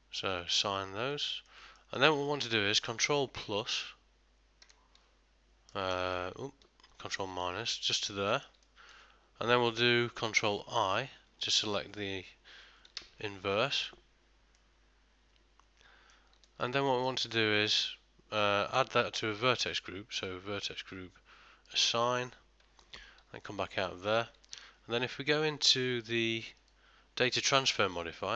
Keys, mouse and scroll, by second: 1.2 middle click, 1.8 ctrl+middle click, 2.3 shift+middle click, 3.8 ctrl+KP_Add, 5.8 right click, 7.4 ctrl+KP_Subtract, 8.1 middle click, 8.7 ctrl+middle click, 13.1 ctrl+i, 14.6 middle click, 16.5 ctrl+middle click, 16.9 shift+middle click, 17.4 middle click, 20.2 click, 22.9 ctrl+middle click, 23.4 Tab, 23.9 middle click, 24.6 ctrl+middle click, 26.7 click.